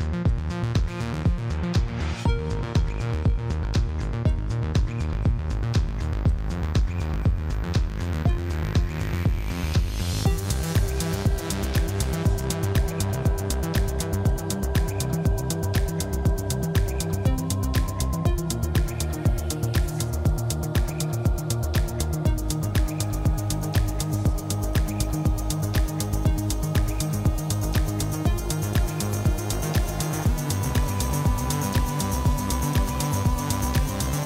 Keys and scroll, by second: 4.3 Tab, 9.8 x, 11.4 Tab, 18.5 Tab, 20.3 x, 21.7 Tab.